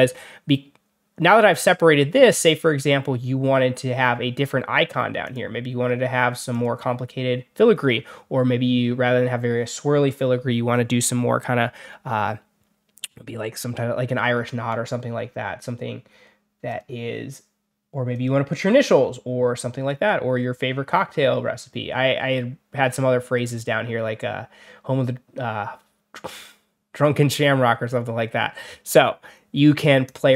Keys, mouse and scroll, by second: 5.1 click, 6.4 click, 16.6 click, 18.0 click, 29.9 click.